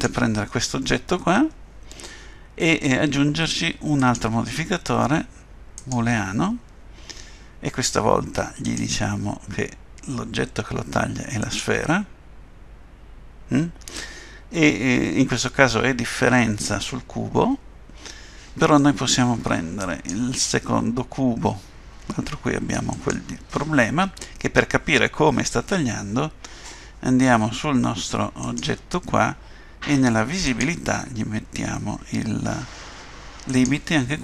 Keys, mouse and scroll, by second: 4.0 click, 8.6 click, 19.8 click, 22.9 click, 28.5 click, 30.4 click.